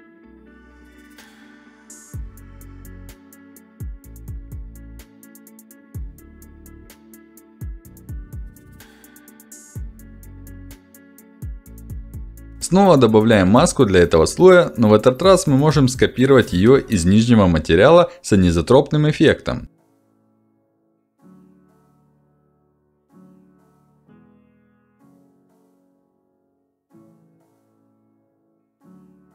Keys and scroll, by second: 14.8 ctrl+z.